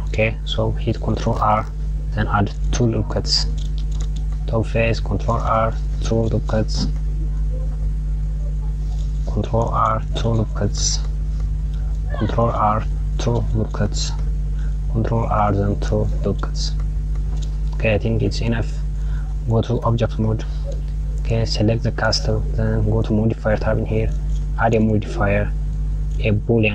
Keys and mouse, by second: 0.9 Tab, 2.5 ctrl+r, 5.9 ctrl+r, 8.8 r, 11.5 r, 12.7 click, 14.2 r, 18.9 click, 19.8 Tab, 20.9 click, 25.2-26.7 drag.